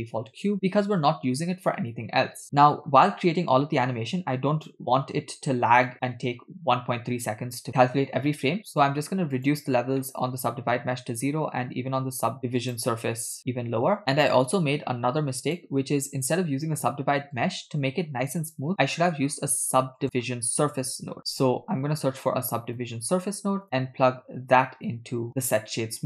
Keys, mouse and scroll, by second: 5.9 middle click, 9.5-10.0 drag, 10.1 middle click, 12.6 click, 13.4 click, 15.5 click, 17.4 click, 17.7 click, 19.0 shift+a, 24.1-25.3 drag, 25.3 middle click.